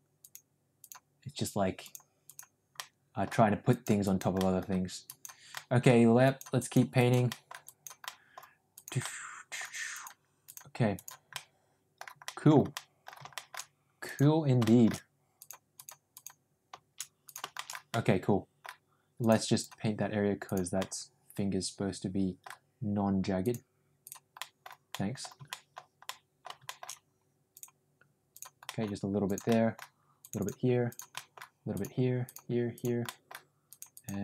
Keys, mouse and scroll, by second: 0.1 click, 0.7 click, 1.7 click, 2.1 click, 2.7 middle click, 3.6 click, 4.0 click, 4.3 middle click, 5.0 click, 5.5 middle click, 6.1 click, 6.5 click, 6.9 click, 7.2 middle click, 7.5 click, 7.9 middle click, 8.6 click, 8.9 middle click, 9.8 click, 10.4 click, 10.8 click, 11.2 middle click, 12.2 middle click, 12.7 middle click, 13.3 shift+middle click, 14.0 click, 14.6 shift+middle click, 15.3 click, 15.7 click, 16.1 click, 17.2 click, 17.5 shift+middle click, 17.8 middle click, 19.1 click, 19.5 click, 20.4 click, 20.8-22.3 middle drag, 23.3 click, 23.9 click, 24.3 middle click, 24.8 middle click, 25.4 middle click, 26.0 middle click, 26.6 shift+middle click, 27.4 click, 28.6 middle click, 29.1 click, 29.4 middle click, 30.1 click, 30.8 click, 31.0 middle click, 31.6 click, 32.1 click, 32.6 click, 32.9 middle click, 33.6 click, 33.9 click.